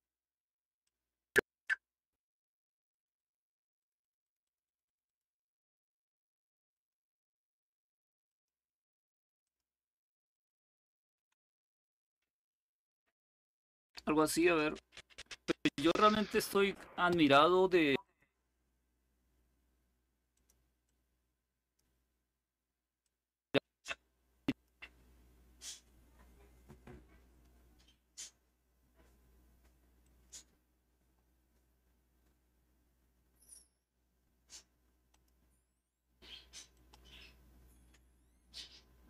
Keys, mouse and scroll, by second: 0.5 click, 2.6-5.4 drag, 6.4 click, 8.0 click, 9.1 click, 10.0 click, 10.9 Delete, 11.7-13.4 drag, 13.9 click, 17.7 click, 20.0 click, 20.5-21.5 drag, 22.7 click, 24.2 click, 29.7 click, 34.8 click, 36.4-37.4 drag.